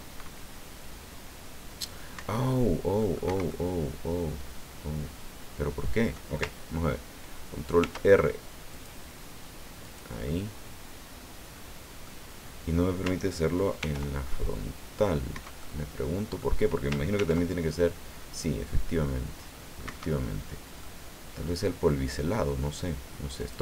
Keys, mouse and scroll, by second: 2.1 Escape, 3.0 click, 3.2 Escape, 3.3 middle click, 3.5-6.3 drag, 7.8 ctrl+r, 8.7 click, 9.8 click, 10.3-12.2 middle drag, 13.8 ctrl+r, 15.3 Escape, 15.6-16.6 middle drag, 17.2 ctrl+r, 19.9 Escape, 20.8-22.5 middle drag, 23.4 click.